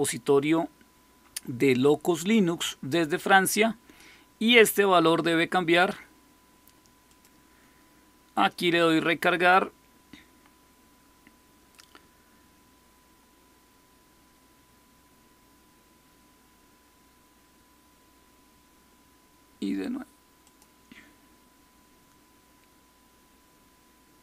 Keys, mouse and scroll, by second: 6.9 click, 20.3 click.